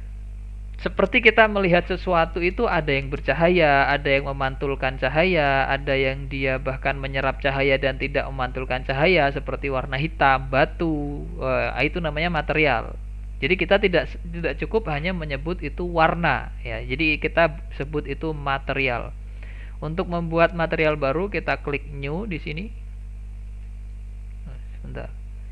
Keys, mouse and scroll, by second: 22.0-25.2 drag.